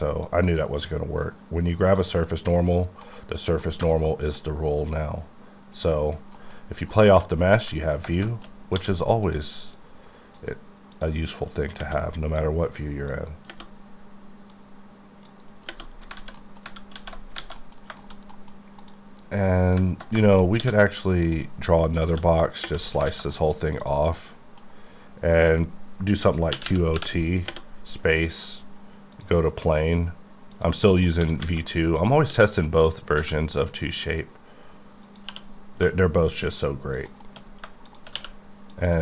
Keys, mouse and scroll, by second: 0.3-2.2 drag, 2.2 middle click, 3.1 middle click, 3.8 shift+middle click, 4.4 middle click, 5.8 click, 6.1 scroll, 6.4 middle click, 6.6-6.9 scroll up 2, 6.9 middle click, 8.3 shift+middle click, 8.5 shift+scroll up 3, 8.8 d, 9.3 click, 9.8 click, 12.4 click, 14.5 click, 16.2 z, 16.4 middle click, 17.0 alt+z, 17.2 alt+scroll down 2, 17.4 alt+a, 17.6 middle click, 17.8-18.3 scroll down 3, 18.0 shift+middle click, 18.3 middle click, 18.8 middle click, 18.9 click, 19.4 middle click, 20.6 d, 21.3 click, 21.7 click, 22.1 x, 23.1 alt+a, 23.3 middle click, 23.9 click, 24.2 middle click, 26.6 q, 26.7 o, 27.0 t, 29.2 click, 30.9 middle click, 31.2 s, 31.4 z, 32.0 click, 32.3 s, 32.8 click, 33.2 q, 35.1 click, 35.3 2, 37.0 shift+click, 37.4 middle click, 37.4 scroll up 1, 37.9 shift+click, 38.2 q, 38.7 click.